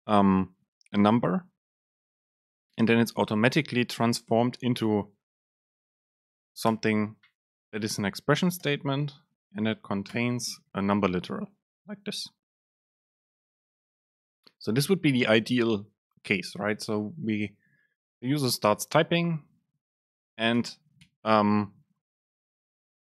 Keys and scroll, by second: 3.7 BackSpace, 4.3 super+space, 8.8 super+space, 19.7 BackSpace.